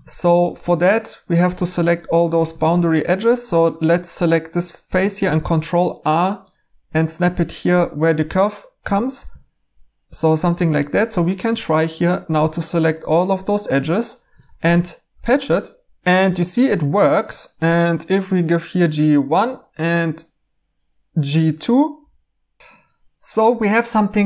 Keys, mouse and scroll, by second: 0.6 Tab, 2.5 Tab, 5.2 ctrl+r, 9.1 ctrl+r, 10.9 2, 16.0 ctrl+z, 16.1 e, 22.6 Tab, 22.6 e.